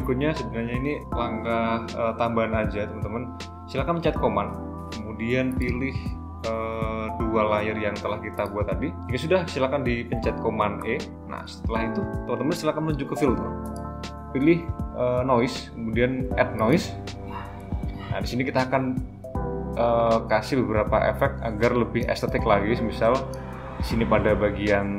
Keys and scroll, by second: 10.8 super+e.